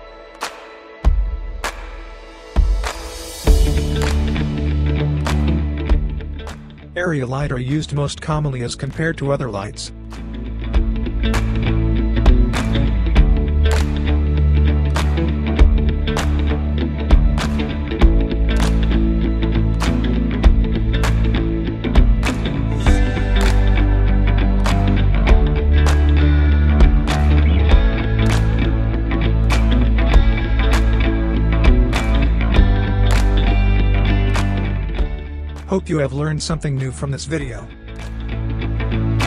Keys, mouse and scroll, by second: 3.7-7.3 drag, 9.8-10.8 drag, 14.1-15.7 scroll down 1, 15.7 click, 19.8 click, 23.6-26.7 drag, 34.2 e, 34.9-38.4 drag, 39.1 scroll up 1.